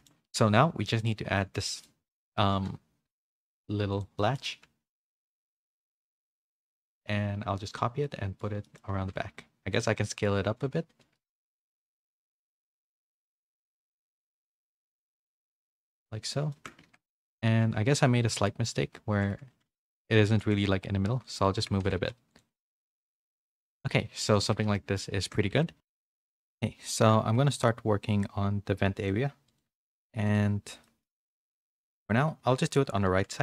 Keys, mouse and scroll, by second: 1.4 shift+middle click, 1.7 middle click, 3.2 KP_3, 3.2 shift+d, 4.2 shift+middle click, 4.6 r, 6.5 g, 8.1 middle click, 8.7 shift+middle click, 9.1 s, 9.9 middle click, 10.6 g, 12.0 middle click, 13.2 click, 14.0 KP_7, 16.5 shift+middle click, 16.8 Tab, 17.1 a, 18.2 g, 19.8 g, 20.6 r, 21.6 Tab, 21.8 a, 22.4 a, 22.5 a, 22.8 middle click, 22.8 a, 24.0 middle click, 24.0 a, 24.6 a, 24.7 middle click, 25.2 shift+middle click, 30.8 middle click, 31.2 shift+middle click, 31.6 middle click, 32.3 KP_3, 33.0 z.